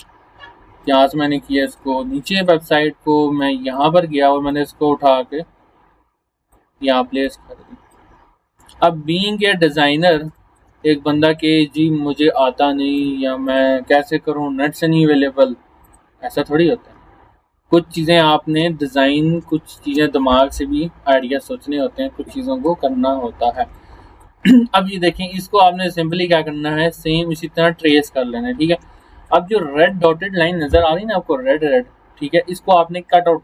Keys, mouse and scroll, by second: 8.6 x, 8.7-9.1 scroll up 1, 9.1 x, 9.2 x, 9.8 alt+scroll up 1, 10.3 space, 10.4 click, 11.0 alt+scroll down 1, 11.7 scroll up 1, 13.0 click, 16.5 scroll up 1, 17.2 alt+scroll up 1, 17.7 alt+scroll down 1, 18.2 space, 18.3 click, 19.0 alt+scroll up 1, 19.4 space, 19.5 click, 19.9 space, 23.1 scroll up 2, 23.3 scroll down 1, 23.7 space, 23.8-24.4 click, 24.2 space, 25.2 alt+scroll up 1, 25.6 space, 25.8-26.4 click, 26.1 space, 26.9 scroll down 1, 27.4-29.8 typing, 27.5-28.1 click, 28.2 alt+scroll down 1, 29.1 click, 29.6 click.